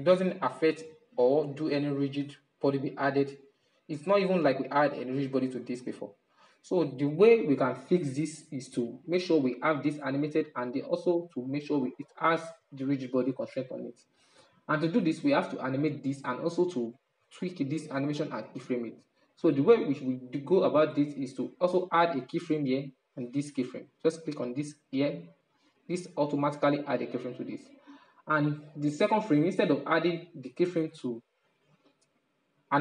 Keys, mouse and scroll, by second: 2.2-6.3 middle drag, 6.3-9.1 drag, 9.1-16.3 middle drag, 17.9-22.4 middle drag, 23.7 click, 28.7-31.7 drag.